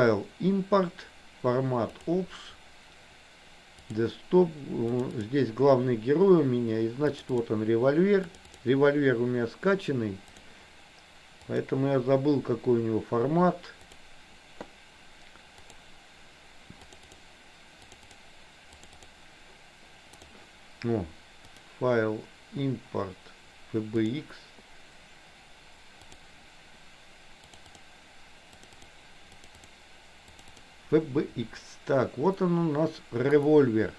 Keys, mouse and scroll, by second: 11.6-14.2 drag, 21.7-24.4 drag, 32.5-33.9 middle drag.